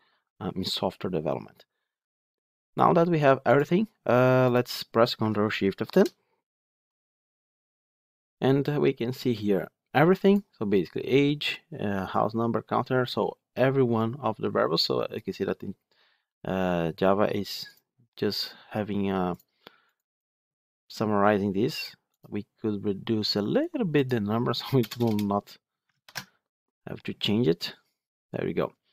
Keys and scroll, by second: 5.8 ctrl+shift+F10, 26.0 ctrl+shift+F10.